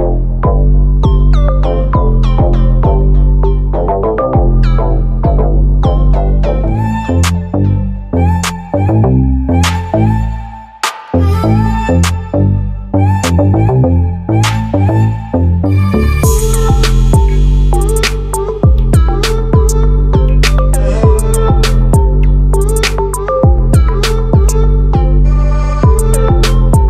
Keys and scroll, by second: 24.9 ctrl+t.